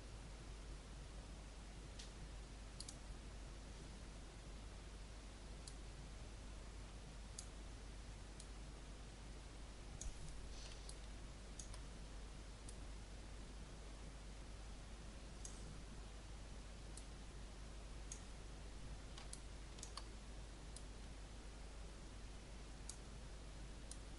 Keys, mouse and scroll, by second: 10.8 alt+click, 12.6-18.6 drag, 19.3 alt+click, 20.7-21.7 drag, 21.8-24.1 drag.